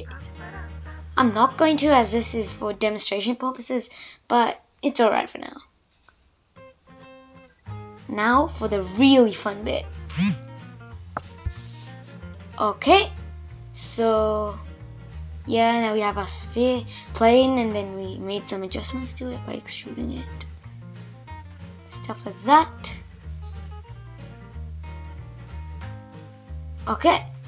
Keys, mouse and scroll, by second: 0.1-1.3 middle drag, 1.3 shift+Left, 2.5-3.0 scroll up 2, 3.0-5.5 middle drag, 5.5-6.9 scroll down 2, 6.9 space, 7.2-8.1 middle drag, 8.1 click, 8.8 Tab, 9.7 e, 11.9 Tab, 12.2-14.4 middle drag, 14.4 shift+Left, 16.3-17.4 middle drag, 17.4 space, 17.8-20.1 middle drag, 20.1 space, 20.4-21.8 middle drag, 21.8 click, 23.4 Tab, 24.6 click.